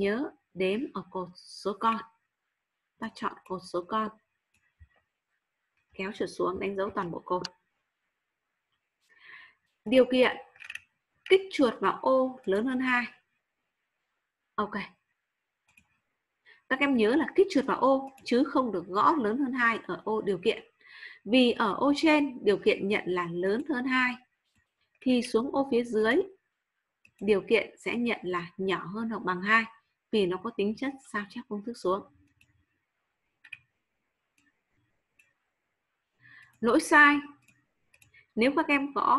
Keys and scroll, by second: 6.6 ctrl+shift+Down.